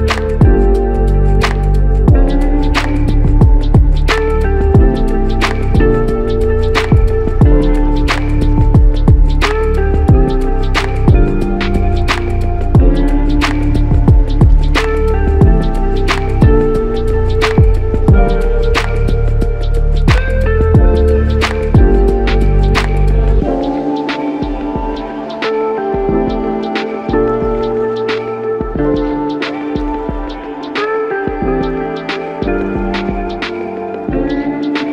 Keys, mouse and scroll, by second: 9.5 double click, 13.9 double click, 29.9 double click.